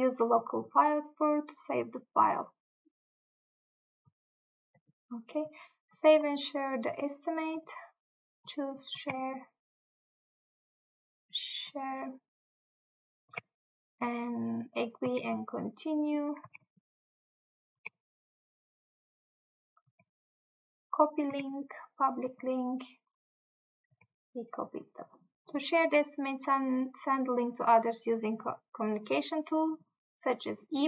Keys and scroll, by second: 9.2 Tab, 13.4 Tab, 15.1 Tab, 16.5 Tab, 17.9 Tab, 20.0 Tab, 21.4 Tab, 24.9 Tab.